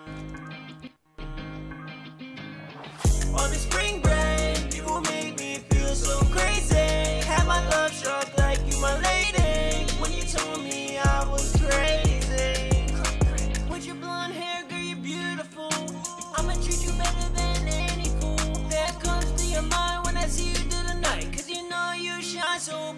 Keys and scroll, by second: 9.8 e, 13.7-15.0 typing, 19.2-19.9 typing, 21.1-22.7 typing.